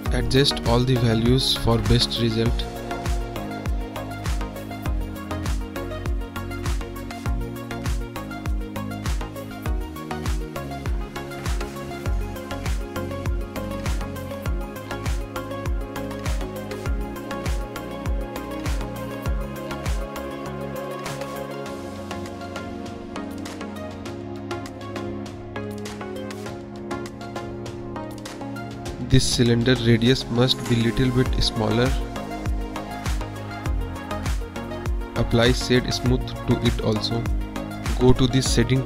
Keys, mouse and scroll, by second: 1.6 click, 2.6 click, 3.4 middle drag, 4.2 middle click, 4.7 click, 5.2 click, 5.9 click, 6.8 click, 7.3 middle drag, 7.6 middle drag, 8.2 middle drag, 8.9 middle drag, 9.7-11.2 drag, 11.7 click, 11.9 click, 12.4 KP_1, 13.1 click, 13.5 click, 13.6 click, 13.8 click, 13.9 click, 14.0 click, 14.1 click, 15.1 click, 15.2 click, 16.6 click, 17.2 click, 17.5 click, 19.2 click, 20.1 click, 20.5 Return, 21.2-22.3 drag, 22.9 click, 23.0 click, 23.8 click, 24.8 click, 25.2 click, 25.6 click, 26.1 click, 26.6 click, 27.2 click, 27.3 click, 28.0-28.5 middle drag, 28.8 middle click, 28.9 middle drag, 29.3-29.7 middle drag, 30.2 click, 30.5 middle click, 31.0 click, 31.3-31.7 middle drag, 31.7 drag, 31.8 middle click, 32.4 click, 33.2 middle drag, 33.6 middle drag, 34.2 click, 34.7-35.3 middle drag, 35.5 middle drag, 36.9 middle drag, 38.2-38.8 middle drag.